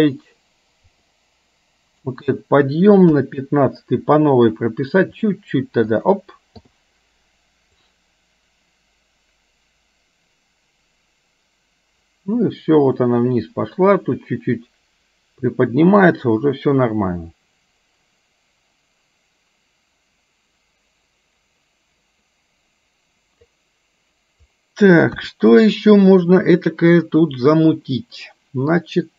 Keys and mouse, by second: 1.1-2.2 drag, 3.1 KP_1, 5.0 r, 6.6 i, 8.0-23.6 drag, 25.1 KP_1.